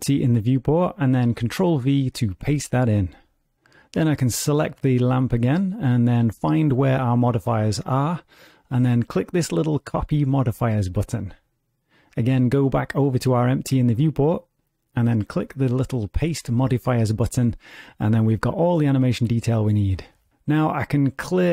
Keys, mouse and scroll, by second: 0.2 click, 1.8 click, 5.5 click, 7.4 click, 9.0 click, 11.0 click, 14.2 click, 16.2 click.